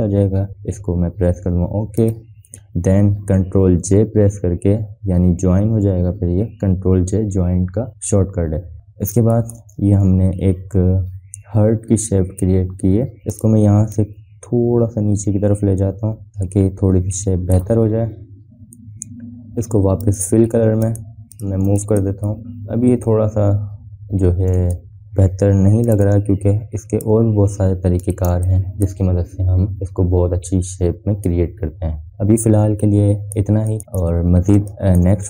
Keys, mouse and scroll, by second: 2.7 click, 6.8 ctrl+j, 9.3 scroll down 1, 10.0 space, 10.1 click, 10.6 v, 11.7 scroll up 1, 12.1 a, 15.0-18.4 shift+drag, 18.8-20.6 scroll down 1, 20.8 click, 21.3 click, 22.4 space, 22.5-23.2 drag, 24.0 a, 25.0 scroll up 1, 25.2 click, 25.6 a, 27.1-28.1 shift+click, 28.4 scroll down 1, 28.8 click, 29.0 space, 29.2-29.8 click, 29.6 space, 32.8-34.1 drag, 34.4 space, 34.5 click, 35.1 scroll up 1.